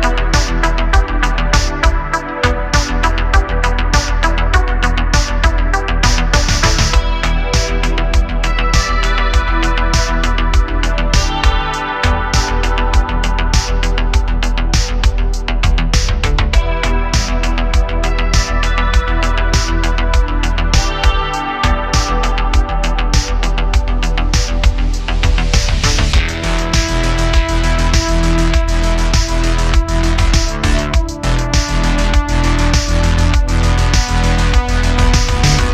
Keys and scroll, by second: 5.5 2, 6.0 Tab, 6.6 2, 10.8 super+b, 12.6 Tab, 17.8 `, 23.4 `, 28.6 q, 31.6 Tab, 32.1 super+r, 32.8 Escape, 33.6 super+z, 34.1 super+r, 34.9 Tab.